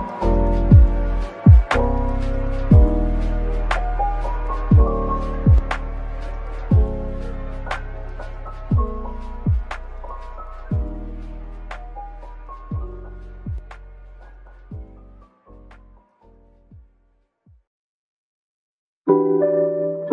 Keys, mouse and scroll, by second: 0.0 alt+click, 0.1-1.0 typing, 5.1 alt+click, 5.5-6.4 typing, 7.0 Tab, 7.3-7.8 scroll down 1, 7.8 Tab, 8.0 scroll up 1, 8.7-9.1 scroll down 1, 9.1 middle click, 11.6 2, 12.4 alt+shift+click, 15.7 alt+shift+click, 18.1 right click, 19.0 s.